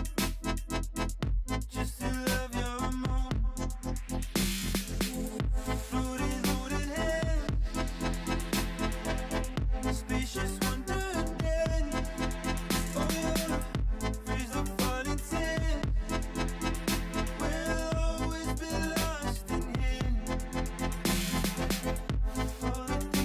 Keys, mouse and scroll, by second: 0.1 click, 0.4 shift+click, 0.8 f, 1.2 middle click, 1.5 scroll down 2, 1.6 middle click, 2.1 drag, 2.3 Tab, 2.5 click, 2.6-4.0 middle drag, 4.5 scroll down 1, 4.7-6.3 middle drag, 6.3 scroll up 5, 6.6-8.1 middle drag, 8.1 click, 8.6 scroll down 2, 8.7-10.0 middle drag, 10.6 shift+middle click, 10.7 scroll up 5, 11.1-12.0 scroll down 1, 12.0 click, 12.2-14.3 middle drag, 16.4 middle click, 16.5-16.9 scroll down 4, 16.9 click, 17.1-18.8 middle drag, 18.9 click, 19.1-19.7 middle drag, 19.7-21.0 scroll up 5, 20.0 drag, 20.1 middle click, 21.0 middle drag, 21.3 click, 21.5 Tab, 22.1 3, 22.5 alt+click, 23.1 alt+shift+click.